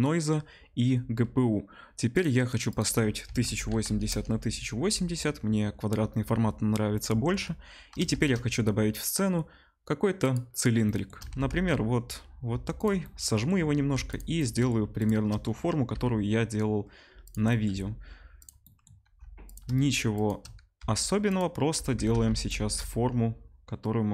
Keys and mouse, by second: 2.1 click, 2.2-2.6 middle drag, 2.6-12.8 drag, 3.8 0, 8.1 shift+a, 11.2 s, 12.8-21.2 middle drag, 13.6 Tab, 13.9 3, 15.9 i, 17.6 x, 19.0 2, 20.7-24.1 typing, 21.2 click, 21.3-24.1 middle drag.